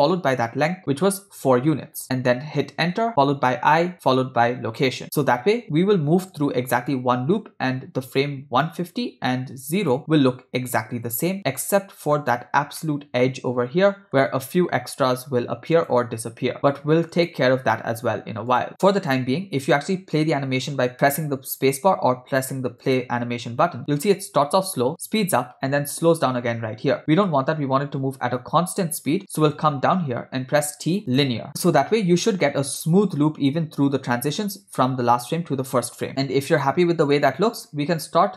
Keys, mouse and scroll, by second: 3.7 i, 6.4 click, 8.7 click, 9.9 click, 12.1 click, 12.9-14.1 ctrl+middle drag, 15.8 click, 17.2 click, 18.6 click, 18.8 ctrl+middle click, 22.8 click, 27.4 space, 30.7 t, 31.6 space, 36.2 space, 37.4 space, 38.0 space.